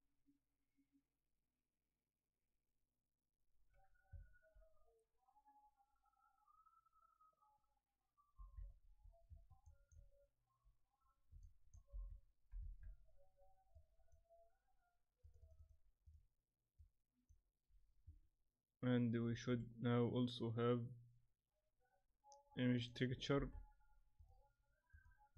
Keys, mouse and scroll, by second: 8.4 shift+F3, 9.6 shift+click, 11.4 shift+click, 13.7 click, 15.2 click, 19.2 shift+a, 22.7 click, 23.3 shift+d, 24.9 click, 25.3 click.